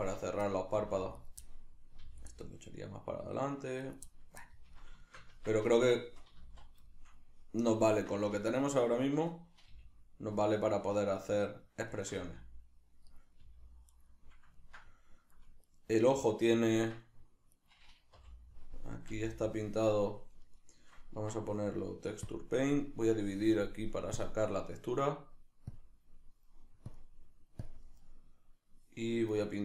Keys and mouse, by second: 0.5 middle click, 0.7 g, 1.3 right click, 1.4-3.9 middle drag, 2.0 g, 3.9 right click, 4.1-7.6 middle drag, 5.3 Tab, 6.4 z, 7.6 right click, 7.9 Tab, 8.6-11.6 middle drag, 9.7 g, 11.6 right click, 12.0-13.2 ctrl+middle drag, 12.2 g, 13.2 right click, 13.4 g, 14.0 right click, 14.6-15.7 ctrl+middle drag, 15.7 right click, 16.8 Tab, 17.6 right click, 18.2 l, 23.1-29.6 drag.